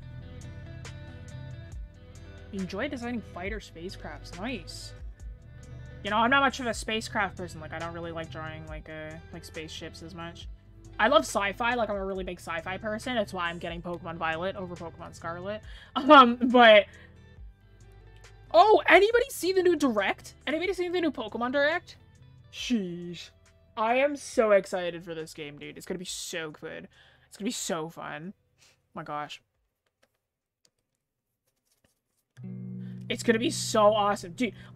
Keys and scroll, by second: 2.8-4.0 scroll down 1, 4.6 scroll up 1.